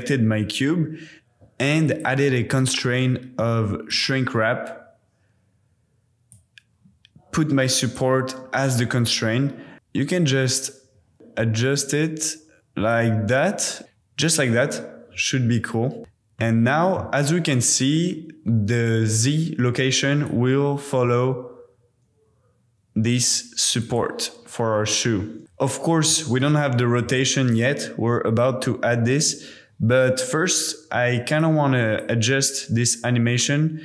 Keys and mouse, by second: 1.9-4.0 drag, 6.3 click, 9.7 KP_1, 11.1-12.9 shift+middle drag, 16.4 click, 20.4 click, 23.9 click, 25.2 space, 25.4 super+s, 31.5-32.1 drag, 32.2 g.